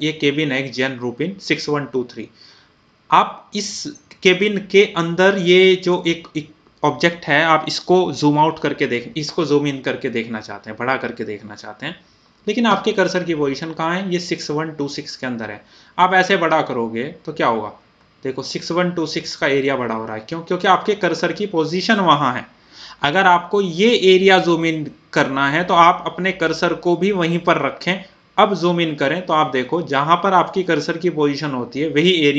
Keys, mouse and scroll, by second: 16.5-16.8 scroll up 1, 18.3-19.0 scroll down 1, 19.4 typing, 28.6 scroll up 1, 28.6 typing, 29.7 scroll down 1, 30.4 scroll up 1, 31.0-32.2 scroll down 1, 32.2-32.3 scroll up 1.